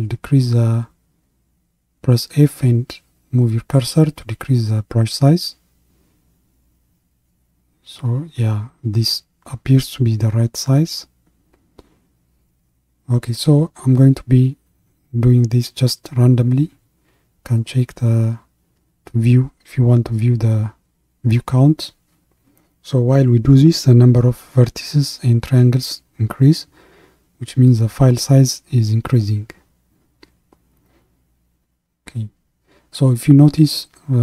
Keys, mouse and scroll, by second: 0.0 f, 6.9-9.6 drag, 10.0-22.2 drag, 25.3 f, 27.6-30.5 drag, 34.0 click.